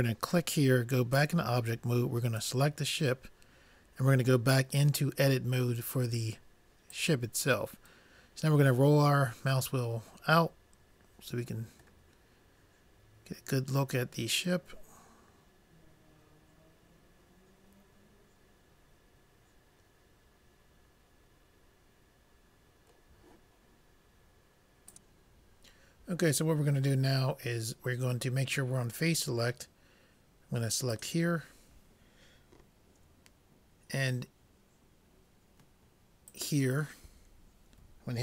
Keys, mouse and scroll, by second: 1.2 click, 2.9-4.1 drag, 9.0 middle click, 13.2-14.3 middle drag, 31.0-32.1 drag, 36.5-38.2 drag.